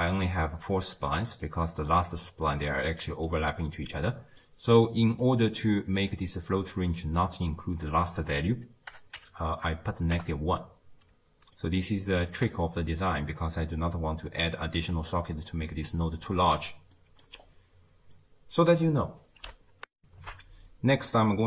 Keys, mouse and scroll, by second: 0.8-1.4 drag, 1.4 d, 1.7-2.7 drag, 2.7 d, 3.1-11.6 drag, 11.6-20.0 right drag, 20.0 n.